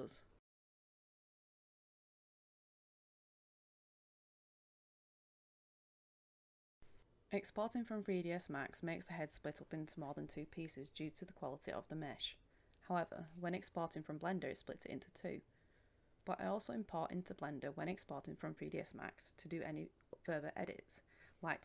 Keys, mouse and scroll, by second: 8.4 click, 10.3 Return, 12.3-16.9 drag, 17.2-21.6 drag.